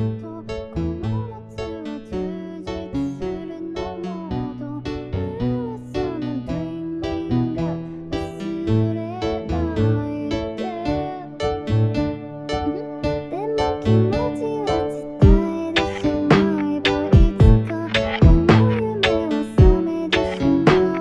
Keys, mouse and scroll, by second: 6.4 ctrl+c, 11.3 ctrl+v.